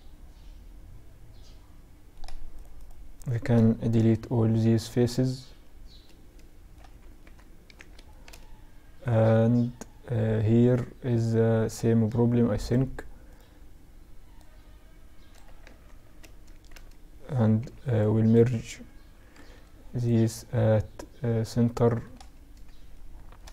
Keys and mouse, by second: 1.7-4.4 right drag, 3.1 x, 4.9 middle click, 6.2 ctrl+r, 7.3-9.1 drag, 9.1 middle click, 11.8-15.3 drag, 12.4-14.4 right drag, 14.4 middle click, 14.8 ctrl+z, 15.4 z, 15.9 a, 16.7 b, 18.5 alt+m, 20.4 z, 20.8-23.5 middle drag.